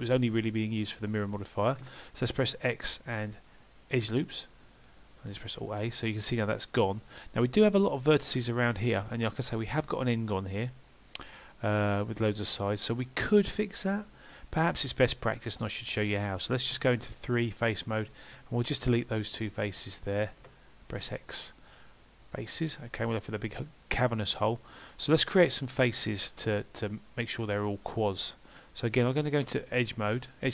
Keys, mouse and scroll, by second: 1.8 x, 5.9 middle click, 14.4-14.8 scroll up 1, 14.8 scroll down 1, 15.1 middle click, 15.1 scroll down 1, 16.8 3, 17.4 click, 18.2 shift+click, 20.5 x, 22.9 middle click, 25.3-25.8 scroll up 2, 25.8 scroll down 1.